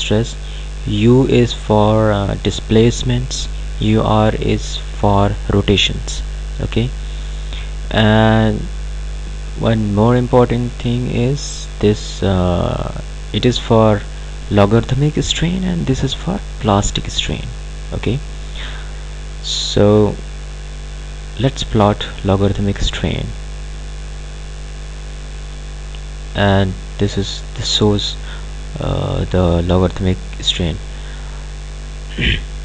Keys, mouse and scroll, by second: 22.1 click, 29.8 click.